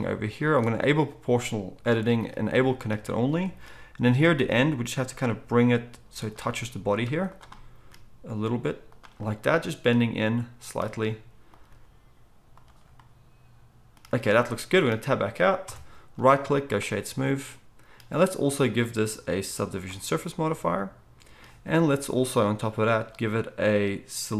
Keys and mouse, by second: 0.5-7.3 drag, 2.6-7.3 shift+middle drag, 4.3 g, 7.8 g, 11.6 g, 15.6 Tab, 18.7-24.3 drag, 18.7-24.3 middle drag.